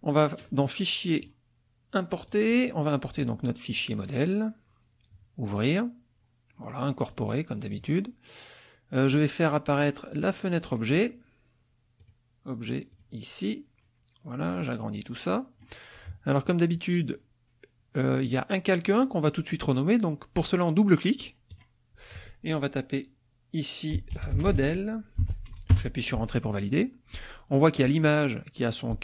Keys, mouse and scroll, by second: 1.2 click, 2.3 click, 3.7 click, 5.4 click, 7.0 click, 9.0-9.6 scroll up 3, 9.7 click, 10.1 click, 12.0 click, 12.9 click, 14.8 click, 17.0 click, 21.2 click, 23.9-25.8 typing, 27.6 click.